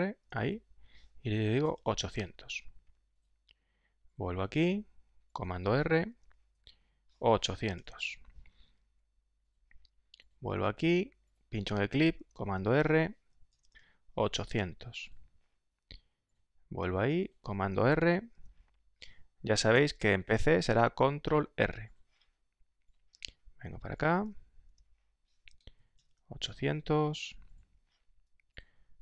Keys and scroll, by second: 0.0 super+r, 1.2-3.4 typing, 6.1 super+r, 7.3-9.4 typing, 12.1 super+r, 13.2-15.4 typing, 18.3 super+r, 19.5-21.3 typing, 24.6 super+r, 25.5-27.4 typing.